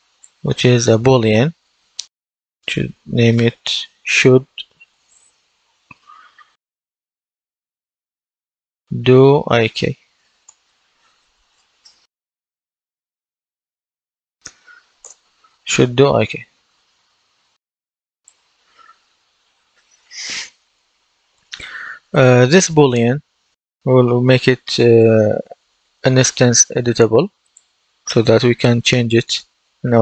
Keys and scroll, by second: 2.1-5.0 typing, 6.4-7.5 typing, 8.6-10.9 typing, 13.4 shift+/, 14.3 BackSpace, 14.9 Return, 19.8 F10.